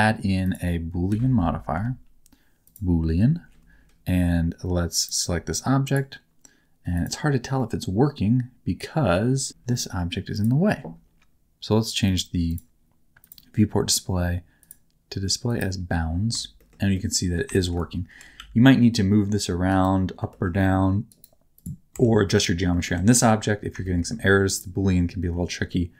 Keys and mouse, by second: 0.5-2.7 drag, 7.6-9.5 middle drag, 12.1 click, 12.5 click, 13.2 click, 14.6-15.7 drag, 16.6 shift+middle click, 16.9 middle click, 17.5 shift+middle click, 18.1 g, 18.5 z, 19.9 right click, 20.2 g, 21.2 right click, 21.9 Tab, 22.2 middle click, 23.1 Tab, 23.8 shift+middle click, 25.7 middle click.